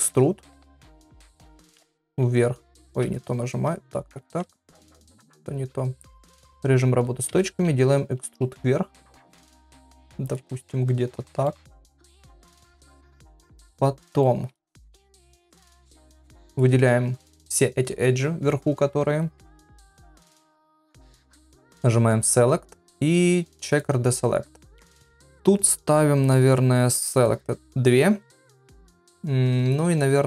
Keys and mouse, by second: 0.8 s, 4.7 ctrl+z, 6.1 click, 7.3 e, 10.6 middle click, 14.0 middle click, 14.7 2, 15.8 click, 22.2-23.9 drag, 27.1 click.